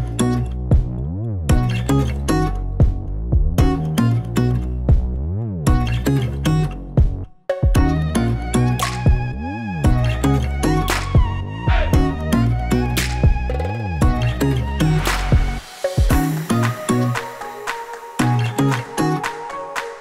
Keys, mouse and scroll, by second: 2.6 click, 3.9 click.